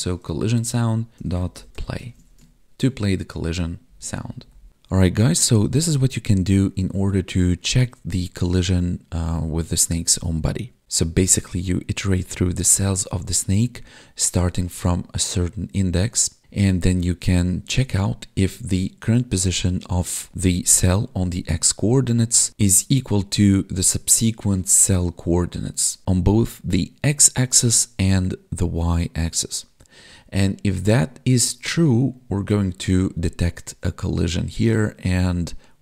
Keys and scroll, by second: 0.4 Tab, 1.7 Right, 2.1 ctrl+s, 3.9 ctrl+Down.